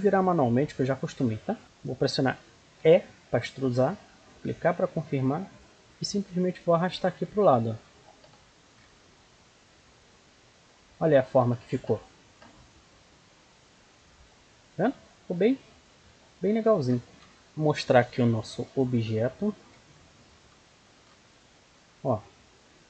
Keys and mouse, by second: 1.1 middle click, 2.7 e, 5.7-7.4 drag, 8.1 z, 8.8-10.6 middle drag, 10.9-15.8 middle drag, 15.8 Tab, 17.1 alt+h, 19.5 KP_1.